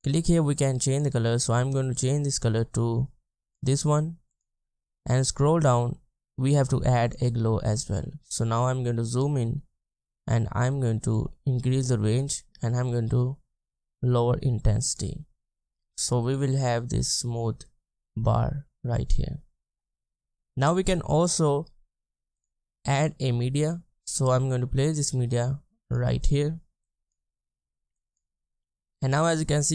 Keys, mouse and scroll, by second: 4.8-8.1 scroll down 1, 8.6-9.4 ctrl+scroll up 1, 9.9-10.2 scroll down 1, 10.2-14.7 scroll up 1, 15.1 scroll, 15.3-15.8 ctrl+scroll down 1, 18.1 space, 28.5 space.